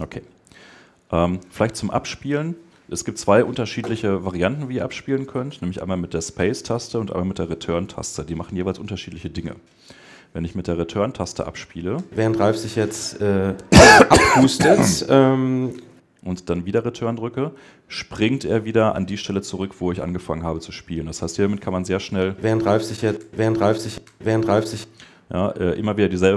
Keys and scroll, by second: 11.8 Return, 15.5 Return, 22.0 Return.